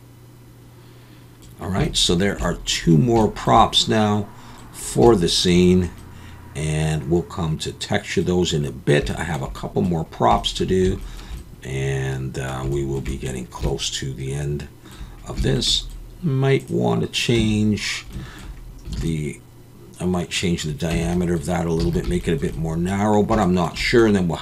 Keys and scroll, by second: 17.4 Tab, 18.9 alt+a, 20.9 Tab, 21.8 alt+a.